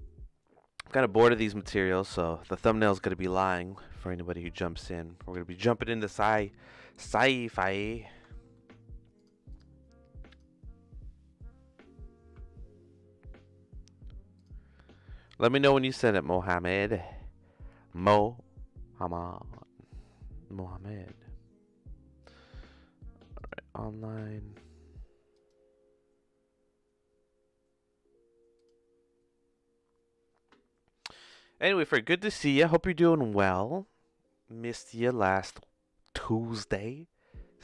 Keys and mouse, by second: 6.9 click, 7.1 n, 7.9 middle click, 8.3 shift+middle click, 9.1 click, 9.5 click, 10.2 click.